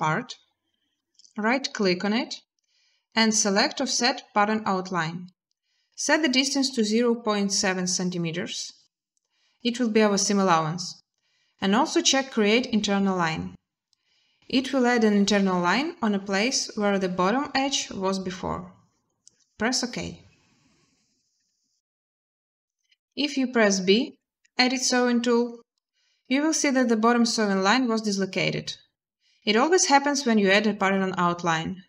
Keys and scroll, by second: 6.5-6.9 typing, 23.9 b.